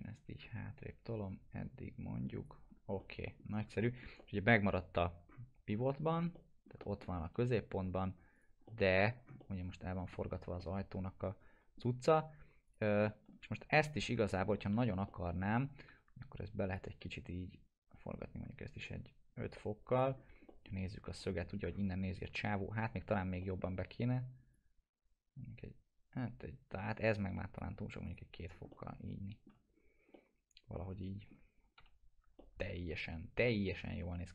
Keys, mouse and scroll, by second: 2.6 scroll down 1, 3.0-3.6 alt+middle click, 3.5 scroll down 1, 3.8 middle click, 4.5 alt+middle click, 5.0 scroll up 1, 6.2 scroll down 1, 6.3 alt+middle click, 7.1 scroll down 1, 7.3 p, 7.8 scroll down 1, 8.3 click, 8.7 alt+middle click, 9.2 scroll up 1, 9.4-10.3 alt+middle click, 10.6-11.8 alt+middle drag, 12.7 click, 13.0 alt+middle click, 14.1-15.9 typing, 15.1 middle click, 15.4 scroll down 1, 16.7-20.2 drag, 20.1 scroll down 1, 20.5 middle click, 20.7 scroll down 1, 21.2 middle click, 21.5 scroll down 1, 23.4 middle click, 23.8 scroll up 1, 24.5-27.6 drag, 28.3 scroll down 1, 28.7-29.6 alt+middle click, 29.7 scroll down 1, 30.1-31.3 alt+middle drag, 31.8 p, 32.4-34.3 alt+middle drag.